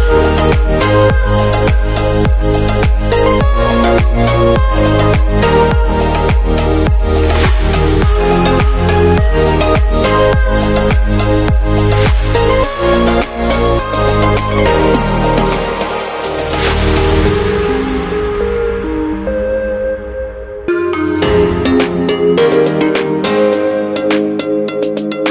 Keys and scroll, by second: 14.7 super+z.